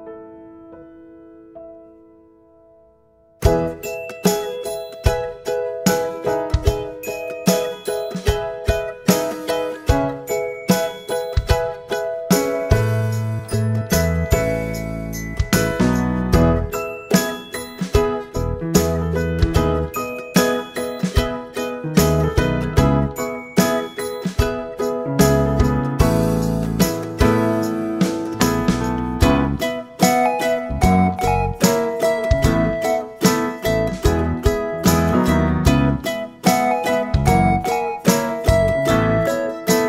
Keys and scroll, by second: 35.5-36.7 typing, 37.3 Return, 37.7-38.5 typing, 39.5-39.8 typing.